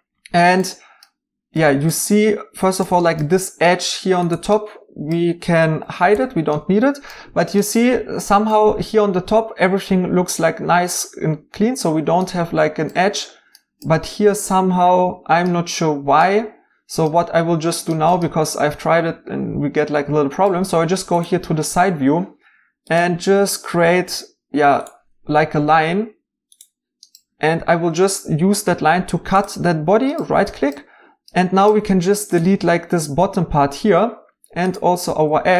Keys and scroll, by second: 5.4-6.1 typing, 7.8-8.6 typing, 28.9 c, 33.0 x, 35.1 x.